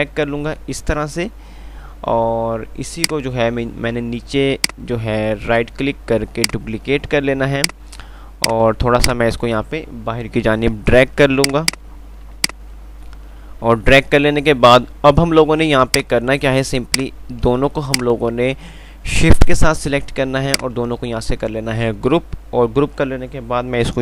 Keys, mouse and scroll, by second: 1.4 F3, 3.2-6.7 drag, 6.7 right click, 8.6 click, 10.8 ctrl+r, 11.3 click, 13.4 ctrl+r, 16.1 click, 20.5 typing.